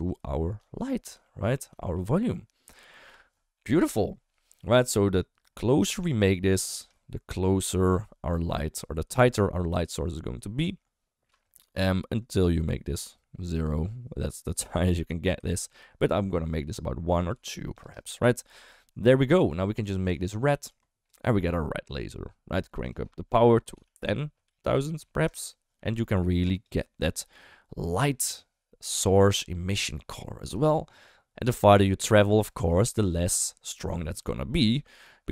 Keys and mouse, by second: 1.2 shift+middle drag, 1.8 shift+middle click, 5.8-6.8 drag, 11.9-13.6 shift+drag, 15.6 ctrl+z, 17.3 click, 22.9-25.3 drag, 24.6 0, 24.8 0, 30.7 shift+middle drag.